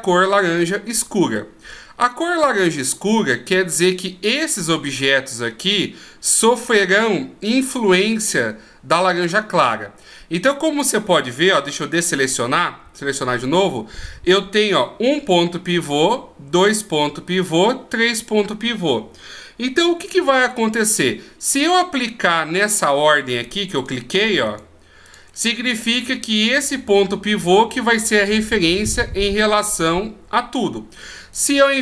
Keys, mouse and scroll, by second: 11.8 a, 12.8 a, 23.7 right click, 24.5 shift+right click, 31.3 right click.